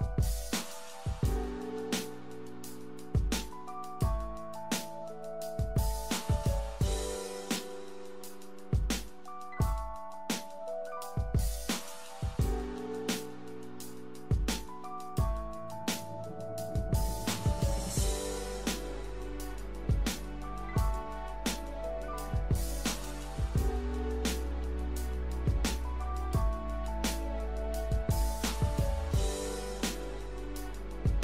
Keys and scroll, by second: 4.8-6.4 typing, 17.9-18.7 typing, 22.9-24.7 typing, 25.8 KP_2.